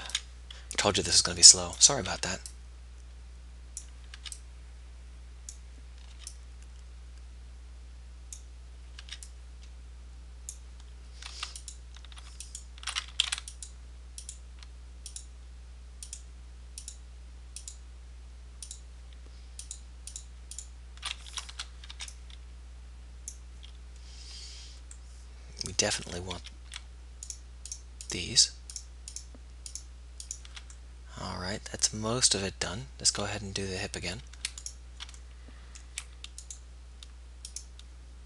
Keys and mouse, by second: 0.2 b, 2.3 b, 4.3 b, 6.4 b, 9.3 b, 13.3 ctrl+z, 21.3 ctrl+z, 22.2 b, 26.5 z, 34.9-36.5 right drag, 36.7-38.2 right drag.